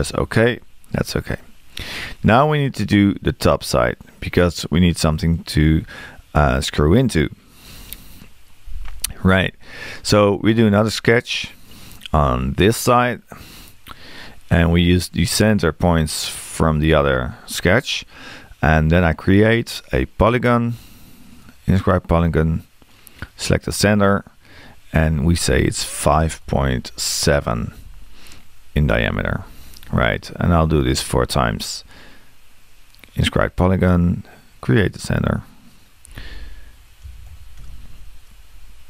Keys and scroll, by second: 26.1 5, 37.0 5.